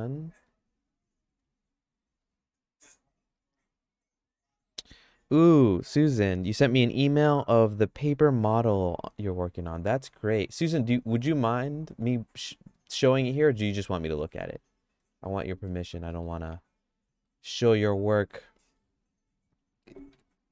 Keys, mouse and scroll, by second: 0.8 shift+click, 12.4 shift+click, 14.6 shift+click, 15.7 f, 16.1 middle click, 16.5 middle click, 19.1 shift+click, 20.1 f.